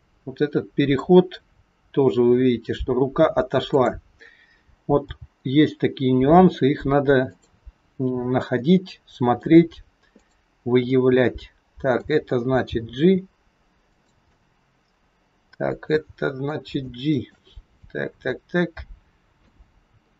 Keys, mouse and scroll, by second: 1.8-3.5 scroll up 1, 3.5 click, 5.1 g, 8.6 middle click, 10.1 click, 10.9 middle click, 12.7 g, 14.3 middle click, 16.8 shift+middle click, 17.8 middle click.